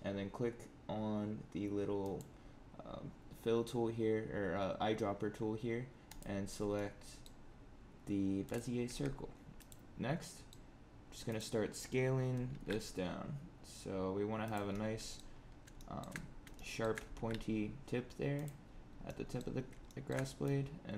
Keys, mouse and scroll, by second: 1.9 click, 6.7 middle click, 7.4-8.4 scroll up 3, 8.4 click, 8.8 Tab, 9.5 click, 10.1 middle click, 11.2 click, 12.4 alt+s, 14.6 middle click, 15.3 scroll up 5, 15.7 shift+middle click, 16.1 scroll up 2, 16.5 shift+middle click, 17.1 alt+s, 18.5-19.2 scroll down 7, 19.0 middle click, 19.8 shift+middle click, 20.4 click.